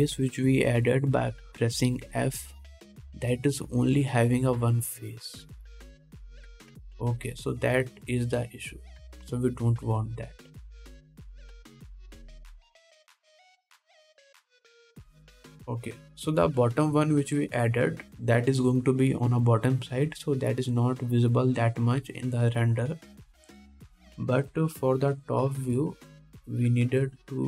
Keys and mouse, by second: 16.4 ctrl+Tab, 17.6 shift+drag, 17.6 shift+middle drag, 17.6 shift+right drag, 18.0 shift+click, 18.0 shift+middle click, 18.0 shift+right click, 26.2-27.4 shift+middle drag.